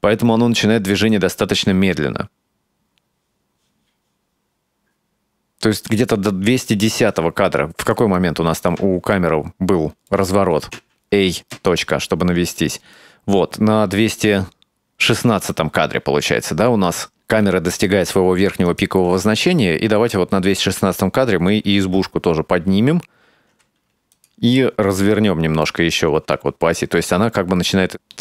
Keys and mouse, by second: 1.1-6.2 drag, 7.9 click, 9.3 ctrl+middle click, 10.8 a, 11.6 KP_Decimal, 13.0 click, 18.7 right click, 21.4 g, 25.0-25.8 middle drag, 27.2-27.8 middle drag, 27.9 r.